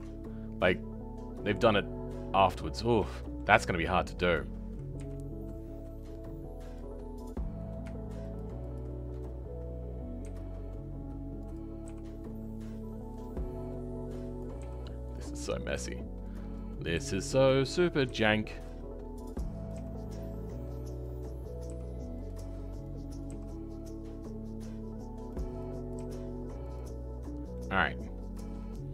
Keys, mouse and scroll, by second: 0.2 scroll down 5, 0.6-2.3 middle drag, 2.3-3.1 scroll up 5, 3.1-4.9 shift+middle drag, 4.9 KP_3, 6.7 click, 10.3 r, 14.4 click, 14.6 g, 27.2 scroll down 4, 27.5-28.7 middle drag, 28.7 scroll up 2.